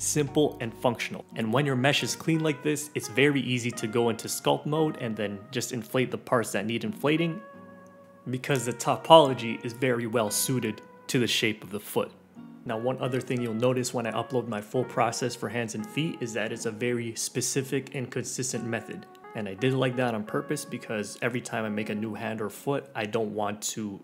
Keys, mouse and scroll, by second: 0.0 middle click, 0.1 click, 0.1 middle click, 0.2 click, 0.3 click, 0.4 middle click, 0.4 scroll down 3, 0.5 click, 0.6-1.0 scroll up 2, 0.6 middle click, 1.0 click, 1.0 middle click, 1.1 click, 1.3 middle click, 1.3 click, 1.4 scroll down 1, 1.5 click, 1.5 middle click, 1.7 click, 1.7 scroll up 2, 1.8 click, 1.9 middle click, 1.9 click, 1.9 middle click, 2.0 click, 2.1 middle click, 2.1 click, 2.4 middle click, 2.4 click, 2.5 middle click, 2.5 scroll down 4, 2.7 middle click, 2.8 click, 2.9 middle click, 3.0 middle click, 3.4 scroll down 1, 3.4 shift+middle click, 3.6 click, 3.7 scroll up 1, 3.8 click, 4.0 middle click, 4.1 click, 4.6 right click, 4.6 middle click, 4.7 click, 4.7 right click, 4.7 middle click, 4.8 click, 4.9 right click, 4.9 middle click, 4.9 Tab, 4.9 right click, 4.9 middle click, 5.0 scroll up 4, 5.1 right click, 5.1 shift+middle click, 5.2 alt+z, 5.3 right click, 5.3 middle click, 5.3 g, 5.5 click, 5.7 shift+click, 5.7 right click, 5.7 g, 5.8 right click, 6.0 scroll down 6, 6.1 middle click, 6.2 scroll up 6, 6.2 shift+middle click, 6.4 click, 6.5 [, 6.6 click, 6.8 click, 7.0 shift+middle click, 7.0 click, 7.3 middle click, 7.4 alt+z, 7.4 scroll down 3, 7.5 middle click, 7.6 ctrl+s, 7.7 middle click, 7.8 click, 7.9 shift+middle click, 8.0 click, 8.1 middle click, 8.2 click, 8.2 middle click, 8.5 click, 8.7 middle click, 8.8 click, 8.8 middle click, 9.0 click, 9.1 middle click, 9.3 scroll down 4, 9.5 scroll up 2, 9.5 middle click, 9.6 Tab, 9.7 click, 9.7 middle click, 9.9 scroll down 2, 10.0 g, 10.1 middle click, 10.1 g, 10.2 middle click, 10.2-10.7 scroll up 2, 10.3 g, 10.5 middle click, 10.5 click, 10.6 middle click, 10.7 scroll down 1, 10.8 click, 11.0 middle click, 11.1 middle click, 11.2 alt+z, 11.3 middle click, 11.4 ctrl+s, 11.5 middle click, 11.8 click, 11.9 middle click, 12.1 middle click, 12.9 click, 13.0 Delete, 13.0 ctrl+r, 13.3 middle click, 13.4 click, 13.4 ctrl+r, 13.5 click, 13.5 middle click, 13.6 ctrl+r, 13.7 click, 13.8 middle click, 14.1 middle click, 14.1-14.9 typing, 14.1 middle click, 14.4 middle click, 14.5 click, 14.6 middle click, 14.7 click, 14.7 middle click, 14.7 click, 14.8 middle click, 15.1 click, 15.1 shift+middle click, 15.4 Tab, 15.5 alt+z, 15.6 Tab, 15.9 Delete, 16.0 middle click, 16.1 scroll down 1, 16.1 click, 16.2-18.7 typing, 16.4 click, 16.6 middle click, 16.6 click, 16.7 middle click, 16.8 middle click, 16.8 middle click, 16.9 middle click, 17.0 shift+middle click, 17.3 click, 17.3 middle click, 17.6 click, 17.7 ctrl+r, 17.9 click, 18.0 middle click, 18.1 alt+z, 18.2 middle click, 18.3 alt+z, 18.3 click, 18.6 alt+click, 18.8 middle click, 19.2 click, 19.3 scroll up 1, 19.4 click, 19.5 shift+middle click, 19.7 middle click, 19.8 scroll up 1, 20.0 alt+z, 20.0-21.0 typing, 20.7 click, 21.1 middle click, 21.2 alt+z, 21.3 middle click, 21.3 scroll down 2, 21.5 right click, 21.6 scroll up 1, 21.6 middle click, 21.8 click, 21.8 scroll down 1, 21.8 middle click, 21.8 scroll up 2, 21.9 right click, 22.0 middle click, 22.0 scroll down 1, 22.1 scroll up 2, 22.1 shift+middle click, 22.2 middle click, 22.4 w, 22.5 f, 22.7 middle click, 22.9 f, 23.0 click, 23.1 g, 23.4 middle click, 23.6 scroll down 4, 23.8-24.0 scroll up 3.